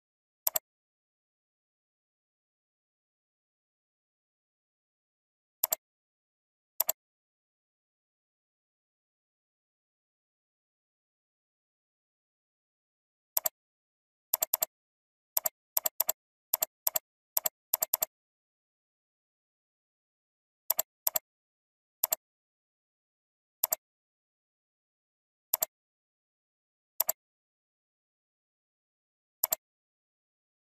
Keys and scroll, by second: 1.9 alt+Up, 4.6 alt+Down, 11.7 ctrl+g, 24.5 F9, 28.7 ctrl+c.